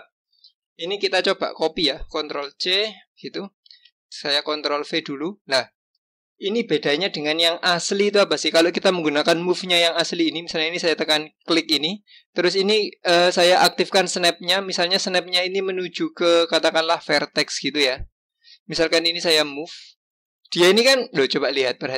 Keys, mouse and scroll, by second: 0.4 click, 2.4 ctrl+c, 4.1 ctrl+v, 8.0 click, 10.0 click, 11.5-14.0 drag, 14.8-17.8 drag, 19.5 click.